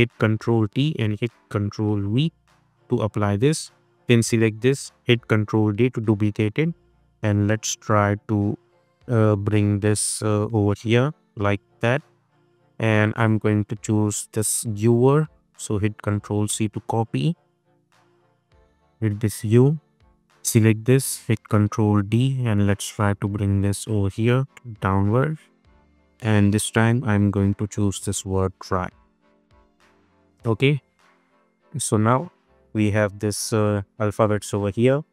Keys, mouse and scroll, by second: 0.3 click, 0.7 ctrl+a, 1.5 ctrl+v, 2.4 click, 4.8 ctrl+d, 5.4-6.0 click, 5.8 space, 6.1 v, 6.6-8.8 drag, 9.5 Down, 11.7 Up, 13.1 click, 15.6 ctrl+c, 16.0 click, 16.6 ctrl+t, 16.9 click, 17.4 ctrl+a, 17.8 ctrl+v, 18.8 click, 20.5-21.0 scroll down 1, 21.3 ctrl+d, 21.8 v, 22.2-23.8 drag, 24.3 Down, 26.8 click, 28.4 ctrl+c, 29.0 click, 29.5 ctrl+t, 29.8 click, 30.4 ctrl+v, 31.4-35.1 drag.